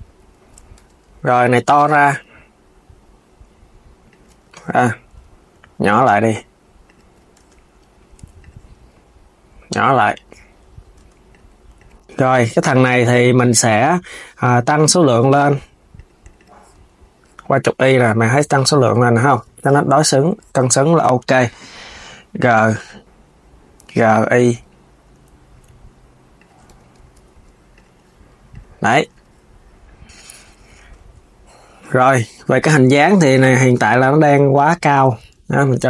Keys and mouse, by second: 0.0 s, 0.5 Tab, 0.9 click, 1.4 alt+s, 3.9 alt+s, 4.2 z, 5.3 alt+s, 6.6 alt+s, 7.7 Tab, 8.1 click, 8.7 alt+s, 9.8 alt+s, 11.0 click, 11.5 click, 15.1 KP_1, 15.7 click, 16.4 KP_1, 18.2 click, 18.8 s, 19.8 click, 22.1 y, 26.4 KP_3, 26.9 s, 27.5 click, 28.2 click, 28.7 click, 29.9 click, 30.5 Tab, 33.0 click, 33.6 click, 34.8 Tab, 35.1 KP_1, 35.7 s.